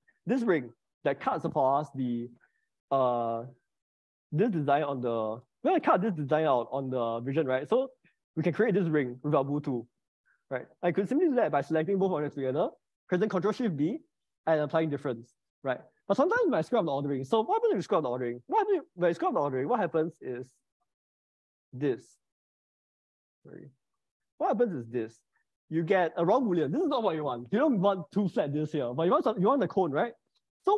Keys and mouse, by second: 0.2-1.5 middle drag, 5.4 middle click, 8.0 middle click, 10.9 ctrl+z, 13.6 ctrl+shift+b, 18.0 ctrl+z, 18.7 ctrl+z, 21.3 shift+click, 22.2 ctrl+shift+b, 23.6 ctrl+z, 25.2 ctrl+shift+b.